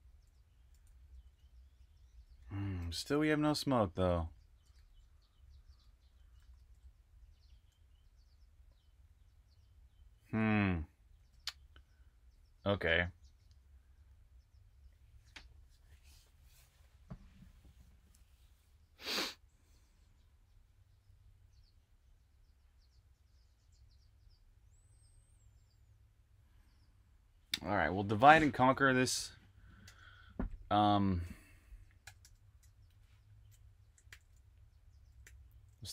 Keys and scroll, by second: 0.0-7.8 typing, 11.0 super+q, 28.9 super+Tab, 29.8 super+Tab, 31.7-32.5 typing, 34.0 super+j, 35.1-35.9 typing.